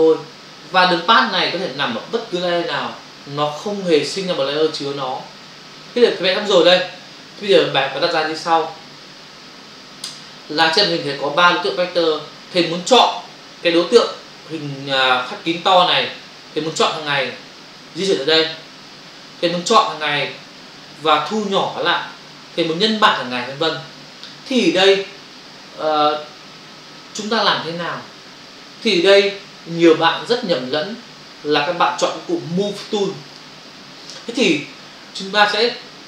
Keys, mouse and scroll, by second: 33.3 click.